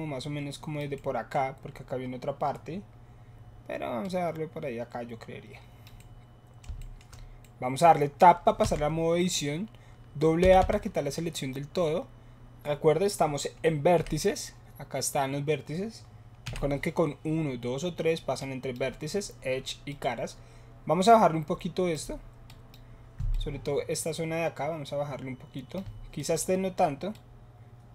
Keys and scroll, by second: 8.6 Tab, 10.4 a, 10.6 a, 14.0 KP_Multiply.